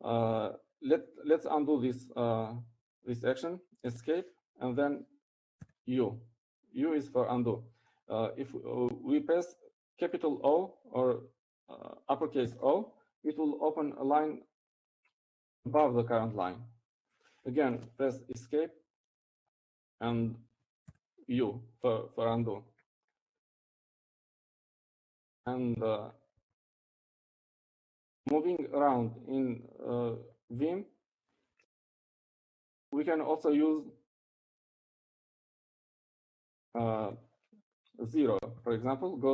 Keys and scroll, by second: 6.6 Escape, 8.5 u, 15.0 shift+o, 20.5 Escape, 23.6 u.